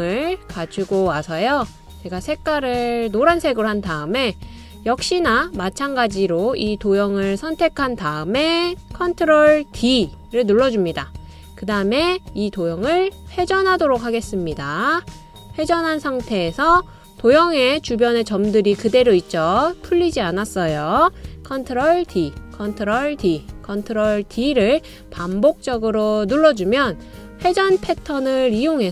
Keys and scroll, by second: 10.8 super+d, 23.0 super+d, 24.0 super+d, 24.6 super+d.